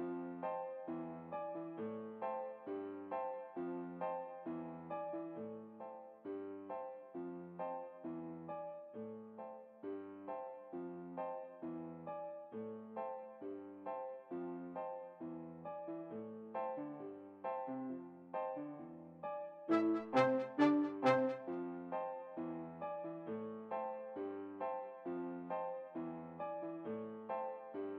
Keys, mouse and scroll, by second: 6.7 alt+g, 8.0-12.3 middle drag, 13.6-15.1 middle drag, 14.8-16.3 drag, 19.0-20.8 middle drag, 20.4 right click, 20.5 click, 20.6-21.8 right drag, 23.6-27.0 drag, 26.2 middle click.